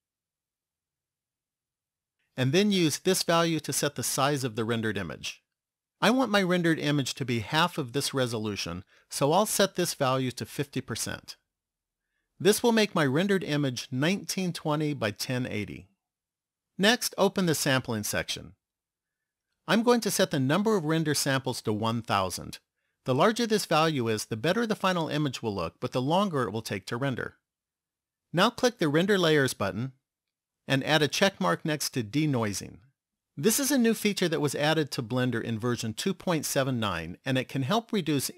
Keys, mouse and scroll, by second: 1.5 click, 9.7 click, 17.0 click, 19.6 click, 21.5 click, 23.3 KP_0, 29.3 click, 31.7 click.